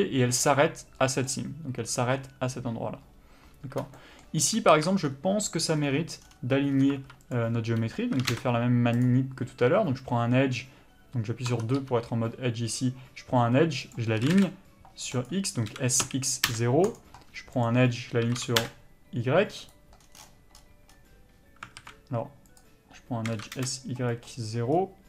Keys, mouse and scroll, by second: 4.7 alt+a, 6.9 2, 7.3 click, 8.2 s, 9.0 click, 14.2 s, 15.2 right click, 15.7 s, 17.6 click, 18.3 s, 19.7 right click, 21.8 alt+a, 22.5 click, 23.3 s.